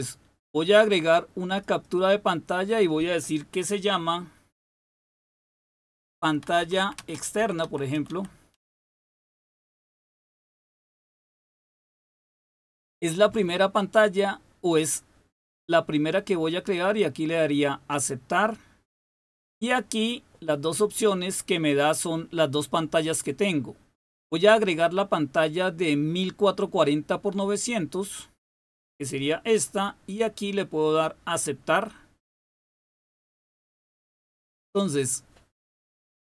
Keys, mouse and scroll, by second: 1.4 click, 1.8 click, 5.3-11.2 typing, 17.4 click, 21.5 click, 27.5 click, 32.2 click.